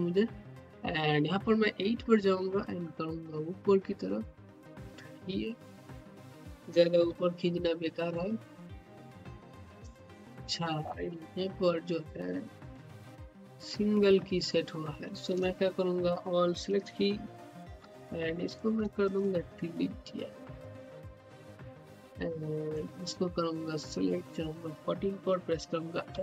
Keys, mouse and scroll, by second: 0.9 typing, 1.4-7.6 drag, 7.6-8.2 typing, 10.0-14.8 typing, 16.5 click, 18.9 shift+click, 19.1 shift+right click, 21.1 click, 26.0 s.